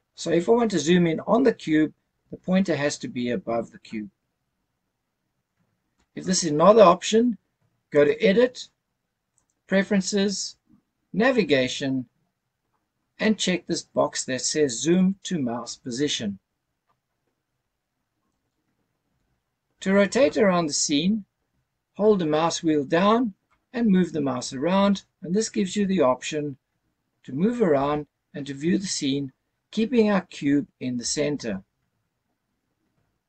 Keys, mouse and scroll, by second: 4.1-5.0 scroll up 3, 7.9-9.8 drag, 19.5-20.3 scroll down 2, 23.5-33.2 middle drag.